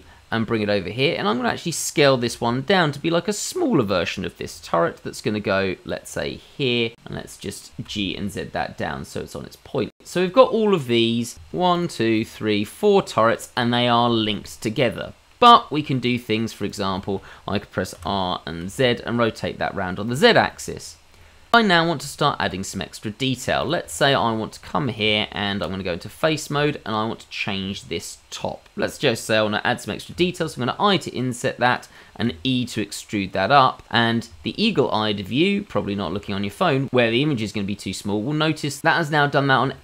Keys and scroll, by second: 2.3 s, 4.5 g, 8.0 g, 18.0 r, 25.0 Tab, 30.1 i, 32.2 e.